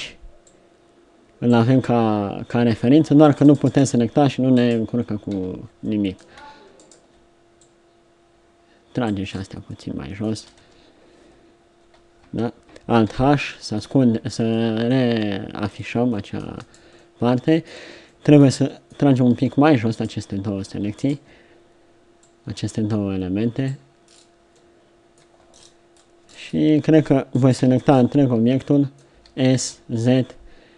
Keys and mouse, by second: 7.6 click, 7.6 right click, 8.5-9.7 drag, 9.7 middle click, 10.3 z, 10.6 Tab, 12.2 Tab, 13.1 alt+h, 14.1 a, 16.5 Tab, 19.4 Tab, 27.6-28.9 middle drag, 27.6 l, 29.1 s.